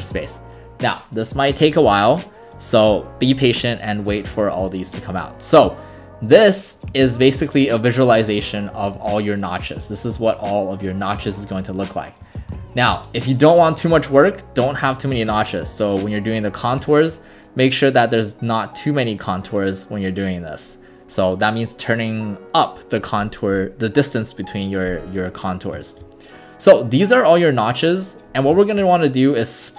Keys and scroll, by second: 0.0 space, 9.0 ctrl+alt+r, 12.5 ctrl+alt+s.